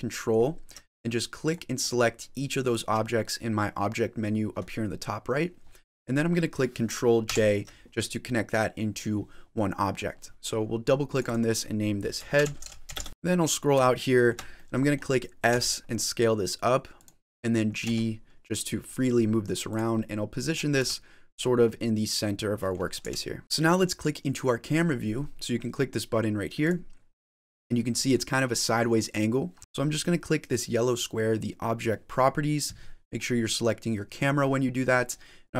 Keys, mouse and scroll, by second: 1.3 ctrl+click, 1.7 ctrl+click, 2.5 ctrl+click, 7.1 ctrl+j, 9.4 middle click, 10.3 middle click, 11.0 click, 11.1 click, 13.1-13.8 scroll down 15, 13.8 shift+middle click, 14.4 middle click, 15.4 s, 17.7 g, 19.9 middle click, 20.6 g, 21.5 middle click, 22.9 g, 23.4-24.2 scroll up 3, 26.5 click, 30.2 click, 34.0 click.